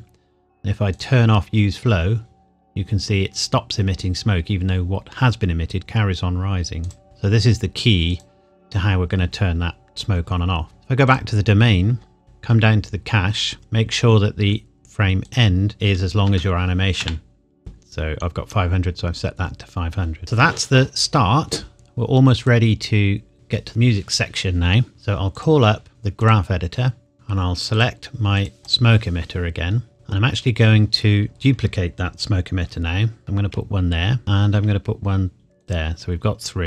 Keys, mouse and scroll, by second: 6.8 click, 10.7-11.0 scroll down 1, 11.0 click, 11.1 click, 12.2 scroll down 1, 15.2 click, 15.8 KP_5, 16.2 KP_0, 17.0 KP_Enter, 20.2 ctrl+s, 22.4 click, 25.3 click, 26.2 click, 27.1 n, 27.7 click, 31.3 KP_7, 33.2 shift+d, 34.2 shift+d, 35.6 click.